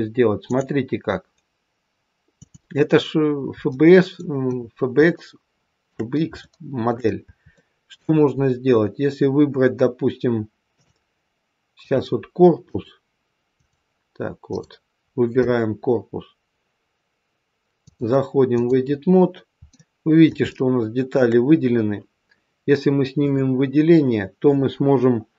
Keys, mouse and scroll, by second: 0.3 click, 3.1-3.7 scroll up 2, 3.7 middle click, 5.1 shift+middle click, 6.3 middle click, 7.5 shift+middle click, 10.7 click, 12.5 click, 13.4 click, 14.4 click, 17.7 click, 19.1-19.7 scroll up 1, 19.7 middle click, 19.7 scroll up 1, 20.4 shift+middle click, 23.1 click.